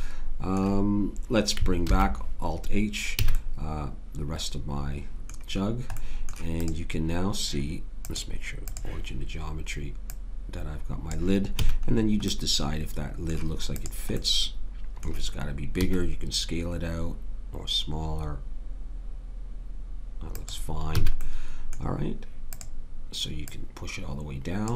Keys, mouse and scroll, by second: 1.8 alt+h, 3.2 a, 11.6 a, 13.8-15.1 drag, 15.8 s, 20.9 a.